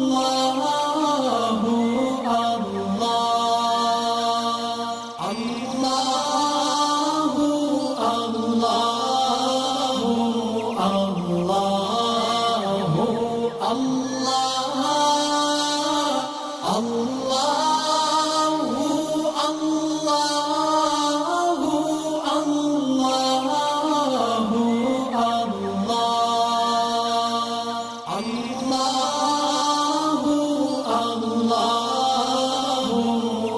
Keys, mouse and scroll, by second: 0.7 click, 2.9 alt+scroll down 1, 3.2 space, 3.3 click, 5.2 ctrl+z, 6.0-7.9 drag, 10.5 alt+scroll up 1, 10.7 space, 10.7 click, 11.3-12.5 drag, 13.5 alt+scroll up 1, 14.0 click, 14.6 ctrl+shift+], 15.1 alt+scroll down 1, 15.6 click, 15.8 click, 15.9 alt+scroll down 1, 16.6 space, 16.8 click, 17.2-17.6 alt+scroll up 2, 20.1-20.5 click, 21.4 alt+scroll down 1, 22.0 space, 22.1 click, 22.7 alt+scroll up 1, 24.5 alt+scroll down 1, 24.7 click, 26.9 shift+click, 30.5 ctrl+g, 30.9 alt+scroll down 1, 31.4 space, 31.5 click, 32.1-32.8 alt+click, 33.2-33.5 alt+scroll up 2.